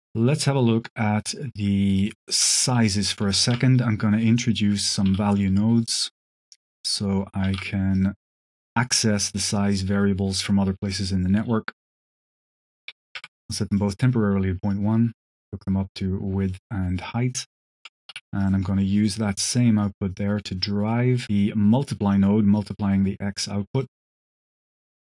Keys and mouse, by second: 1.0 click, 1.8 click, 2.3 h, 2.6 click, 2.9 click, 3.4 shift+a, 4.7 click, 4.9 q, 7.5 shift+d, 7.8 click, 8.4 click, 9.4 click, 12.2-13.4 alt+drag, 13.6 click, 14.6-15.4 drag, 15.9-16.4 drag, 16.8 click, 17.6 shift+click, 18.0 g, 18.7 drag, 19.7-21.5 drag, 22.0-23.8 drag, 24.1 click, 24.7 click.